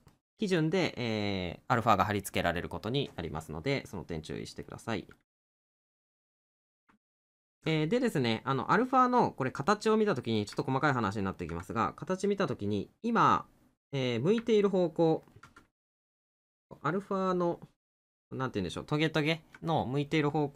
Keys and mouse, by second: 3.9 middle click, 5.2 middle click, 9.7 middle click, 14.6 middle click, 20.1 middle click.